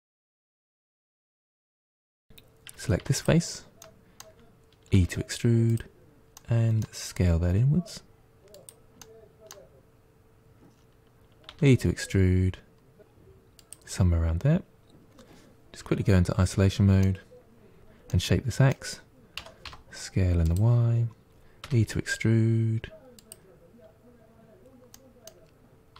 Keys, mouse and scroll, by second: 0.4-1.7 middle drag, 1.7 scroll up 1, 1.9 middle click, 2.9 3, 3.0 click, 3.7-4.8 middle drag, 4.8 e, 6.2-7.3 middle drag, 7.3 s, 8.9-11.4 middle drag, 11.4 e, 14.1-15.7 scroll down 2, 15.7 KP_Divide, 16.9 middle click, 17.9-19.3 middle drag, 19.3 s, 21.5 e, 24.8-25.8 middle drag, 25.8 s.